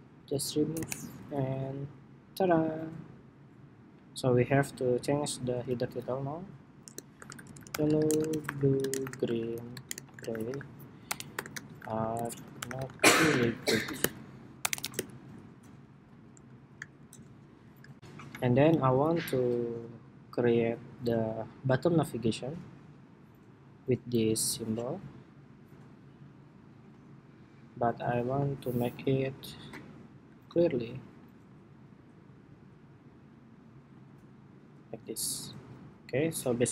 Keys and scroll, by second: 5.4 super+a.